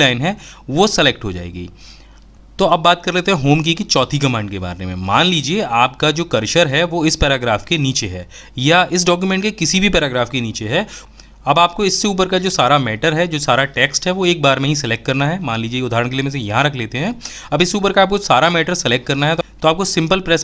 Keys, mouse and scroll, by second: 19.4 ctrl+shift+Home.